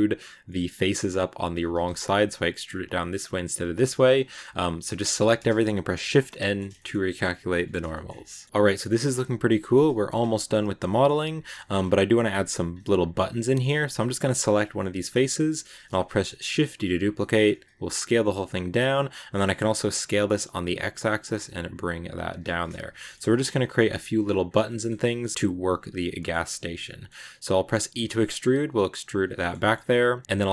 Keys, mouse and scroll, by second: 3.5 ctrl+z, 3.8 ctrl+z, 4.7 a, 5.9 shift+n, 6.0 scroll down 2, 6.2-7.4 middle drag, 7.4 Tab, 7.8 shift+middle click, 7.9 scroll down 1, 8.0 scroll up 1, 8.1-10.0 middle drag, 10.0-10.4 scroll up 2, 10.4-11.6 middle drag, 11.6 scroll up 2, 13.3 right click, 13.8-16.3 shift+middle drag, 16.3 shift+d, 17.5 s, 18.8 middle click, 19.0 s, 22.3 middle click, 22.8 shift+scroll up 2, 23.1 middle click, 23.6 g, 24.5 middle click, 24.8 shift+scroll up 1, 24.9 shift+middle click, 25.3 g, 26.1 middle click, 26.3 s, 26.7-27.8 middle drag, 27.8 e, 29.2 shift+middle click, 29.7-30.2 scroll up 1, 30.2 l, 30.4 right click.